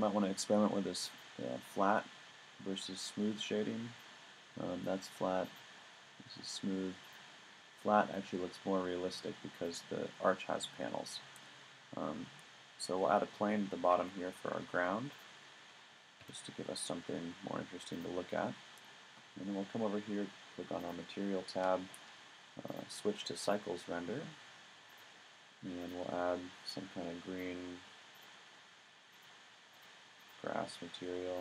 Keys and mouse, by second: 2.2-2.8 middle drag, 5.4 click, 8.1 middle click, 10.2-11.4 middle drag, 14.0 shift+a, 16.2 s, 18.0-18.4 drag, 20.8-21.6 drag, 28.7 middle click.